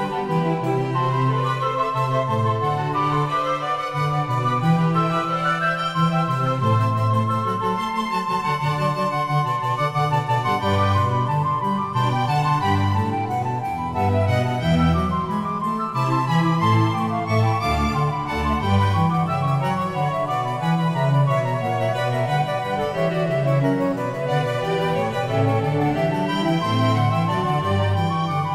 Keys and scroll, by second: 0.9 g, 5.6 g.